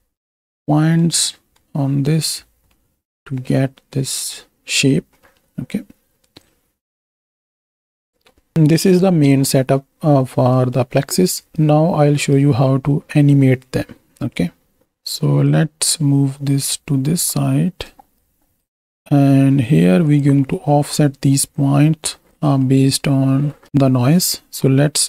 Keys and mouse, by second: 0.7-1.0 middle drag, 2.8-4.3 middle drag, 5.3 middle click, 6.4-7.8 drag, 8.2 click, 8.5 KP_7, 8.7 click, 9.3 ctrl+space, 10.5 click, 11.2 drag, 11.5 click, 11.9 click, 14.8 ctrl+space, 15.0-15.4 drag, 16.0-17.8 drag, 18.2 shift+click, 18.8 g, 20.5 middle click, 21.6 click, 22.7 middle click.